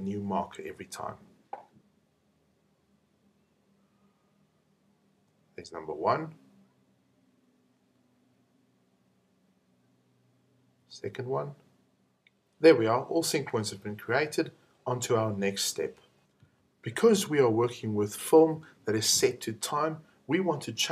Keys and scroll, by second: 5.1 p, 10.7 p.